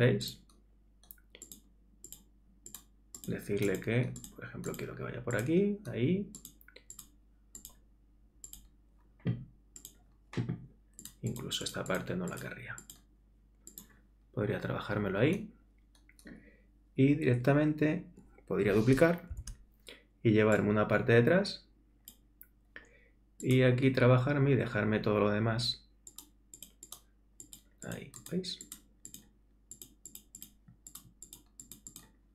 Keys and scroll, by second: 19.3 super+j.